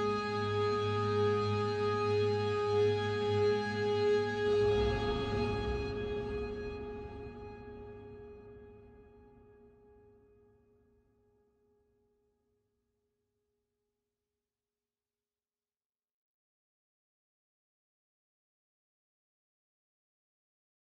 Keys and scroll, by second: 1.7 Tab, 2.7 x, 3.9 1, 4.4 3, 10.0 ctrl+s.